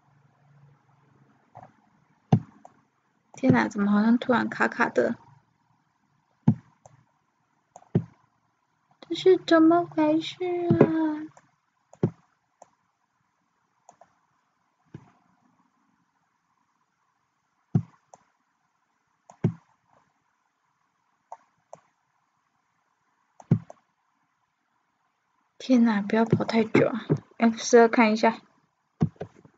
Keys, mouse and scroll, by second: 14.1-29.5 middle drag.